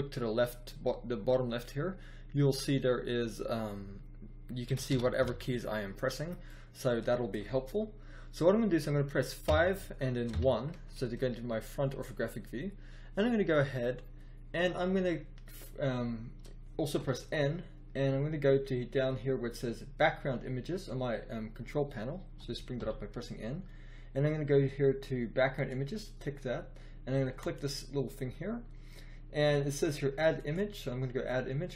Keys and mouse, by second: 4.6 a, 4.8 s, 5.1 f, 9.4 KP_5, 10.2 KP_1, 16.9 n, 22.3 n, 22.7 n, 30.2 middle click.